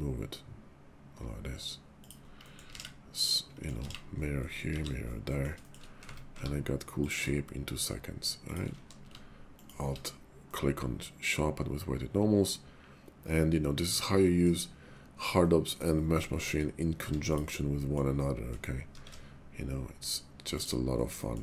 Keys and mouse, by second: 2.0 click, 2.4 middle click, 2.7 alt+x, 3.3 middle click, 3.9 alt+x, 4.4 middle click, 4.8 alt+x, 5.3 click, 5.6 shift+click, 6.0 Tab, 6.3 q, 8.5 shift+click, 8.7 q, 10.5-14.4 middle drag, 15.4-15.8 middle drag, 16.2 shift+middle click, 17.0 Tab, 17.8 middle click, 18.9 alt+shift+1, 20.6 click, 21.2 middle click.